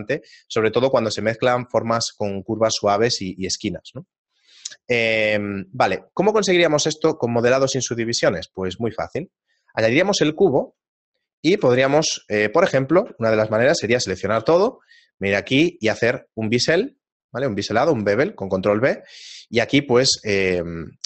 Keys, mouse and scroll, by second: 4.0 right click, 5.8 g, 7.5 a, 8.0 shift+a, 9.7 middle click, 10.5 shift+middle click, 14.4 ctrl+b.